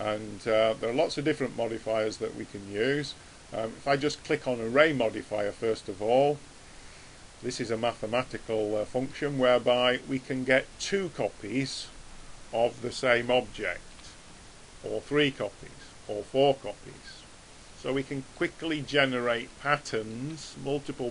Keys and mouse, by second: 1.0 click, 5.9-7.3 middle drag, 15.0 click.